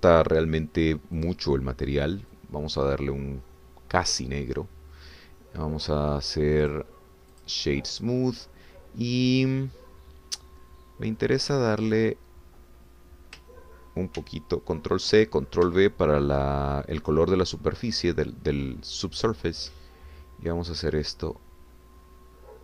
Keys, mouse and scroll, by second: 0.2 click, 2.2 click, 3.3-5.4 drag, 7.7 middle click, 8.3 click, 15.2 ctrl+c, 16.7 ctrl+v, 21.5-22.6 drag.